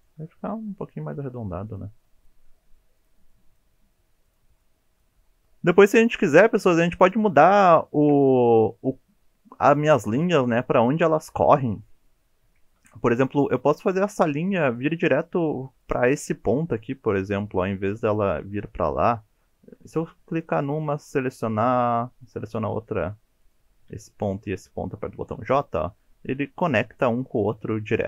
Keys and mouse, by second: 0.2 g, 1.3-3.4 typing, 1.7 click, 2.3 click, 2.4 click, 2.6 click, 2.7 click, 3.1 click, 3.3 click, 4.1 shift+middle click, 4.3 middle click, 4.6 middle click, 5.9 KP_7, 7.7 shift+middle click, 12.6 shift+middle click, 14.7 shift+click, 15.8 click, 17.1 shift+click, 20.4 click, 22.2 shift+click, 23.4 click, 25.2 j.